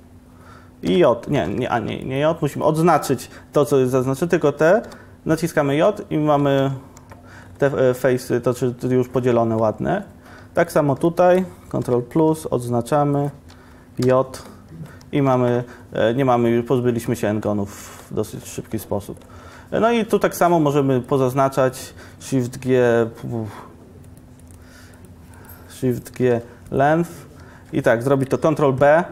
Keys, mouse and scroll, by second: 1.0 ], 6.7 Tab, 7.1 Tab, 11.9 ctrl+KP_Decimal, 14.1 j, 15.1 Tab, 15.4 Tab, 19.5 Tab, 19.9 Tab, 20.2 2, 22.6 shift+g, 28.5 ctrl+b.